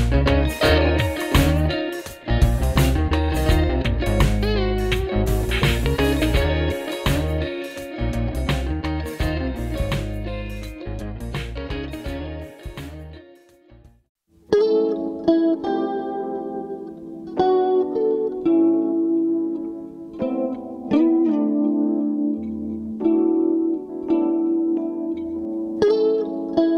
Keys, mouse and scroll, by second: 5.9 double click, 23.8 double click.